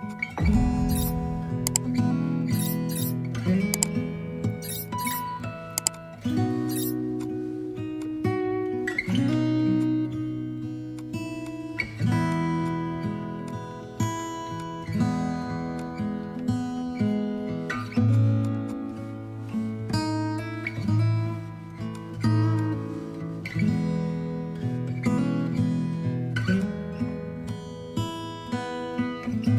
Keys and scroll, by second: 2.7 Down, 8.6 b, 10.6 ctrl+z, 18.7 space.